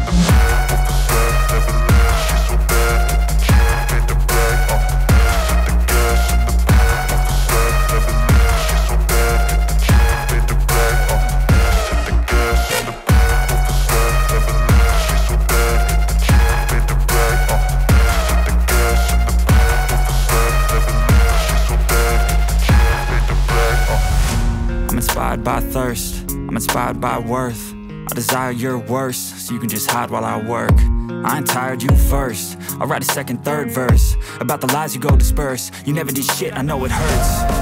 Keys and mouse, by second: 0.1 Tab, 0.6-1.7 middle drag, 1.9 KP_1, 2.4 z, 3.2 click, 3.5 click, 5.1 p, 5.9 click, 6.3-8.3 typing, 6.6 click, 6.8 click, 7.2 click, 7.4 click, 7.6 click, 7.9 click, 8.1 click, 8.3 click, 8.6 Tab, 8.8-9.1 drag, 9.3-11.1 drag, 12.1 drag, 13.2 Tab, 13.7 click, 14.8-19.1 typing, 15.5 click, 15.8 click, 16.1 click, 16.3 click, 16.5 click, 16.7 click, 16.9 click, 17.2 click, 17.5 click, 17.7 click, 18.1 click, 18.3 click, 19.1 click, 20.1 Tab, 20.4-20.9 drag, 20.9 click, 21.5 shift+middle click, 22.0 click, 23.6 click, 24.7-25.1 drag, 26.0 shift+click, 26.2 m, 27.7-28.9 drag, 29.0 drag, 29.3 click, 30.0 click, 30.1 shift+middle click, 30.5-32.1 middle drag, 32.4 shift+middle click, 33.0 shift+a, 34.4 middle drag, 34.9 middle drag, 35.5 click, 36.6 click, 37.2 drag.